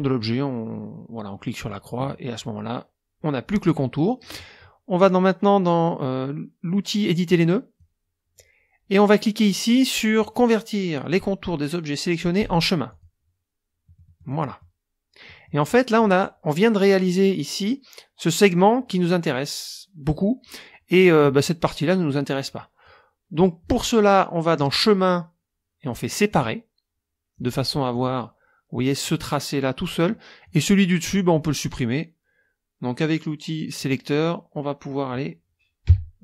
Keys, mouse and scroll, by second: 1.7 click, 7.3 click, 12.9 click, 13.9 click, 15.2 click, 21.4-23.0 drag, 24.6 click, 26.3 click, 27.4 click, 27.9 click, 30.4 click, 33.8 click, 35.8 KP_5.